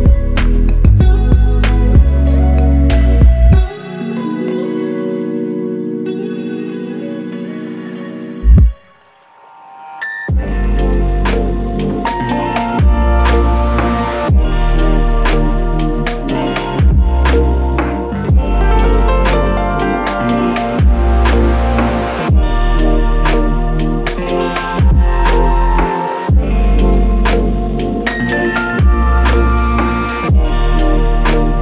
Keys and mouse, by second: 1.0 ctrl+click, 1.9 ctrl+click, 3.5 ctrl+click, 4.2 ctrl+click, 5.2 ctrl+click, 6.4 ctrl+click, 8.2 alt+click, 9.3 w, 18.6 ctrl+click, 23.4 alt+click, 26.1 shift+click, 28.4 alt+click, 28.8 shift+click.